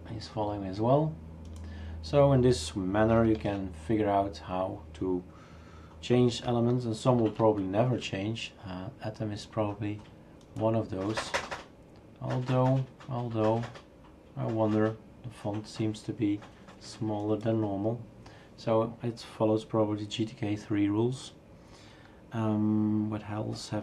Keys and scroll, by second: 3.4 shift+super+q, 7.2 super+F2.